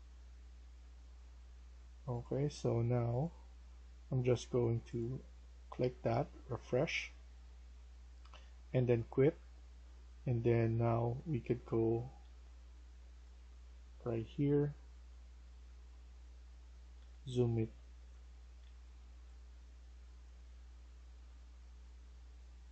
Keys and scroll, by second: 9.7-12.1 w, 12.1 5, 13.2-15.7 typing, 16.9 typing, 18.3-21.2 typing, 22.4-22.7 typing.